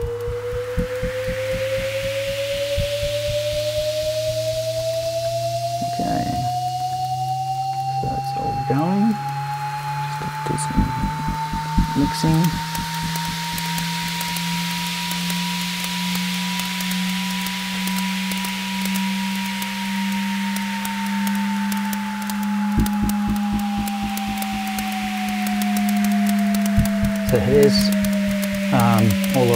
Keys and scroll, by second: 6.5 BackSpace, 6.9 9, 10.3 BackSpace, 11.0 6.